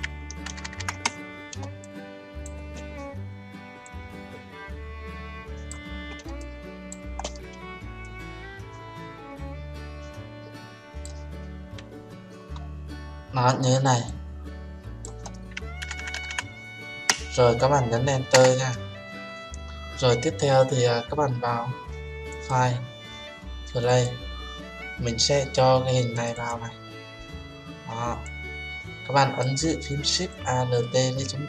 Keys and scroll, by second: 18.3 Return.